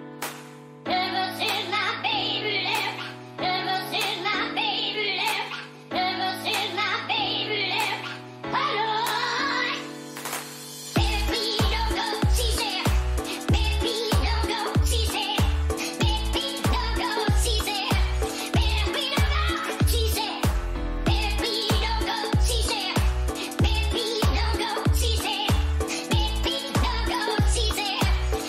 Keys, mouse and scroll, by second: 1.3 k, 19.4-22.8 middle drag, 20.6 a, 25.4-27.2 middle drag.